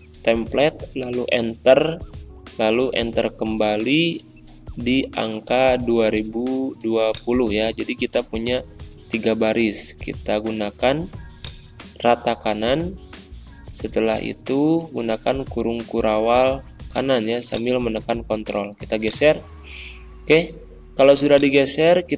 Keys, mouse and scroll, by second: 0.0-4.0 typing, 0.2 Return, 4.8 ctrl+Down, 7.0 click, 8.1 Return, 8.8 ctrl+a, 11.3 click, 12.4-13.2 typing, 13.5 ctrl+], 17.4-18.9 drag, 19.8 ctrl+a, 21.2 click.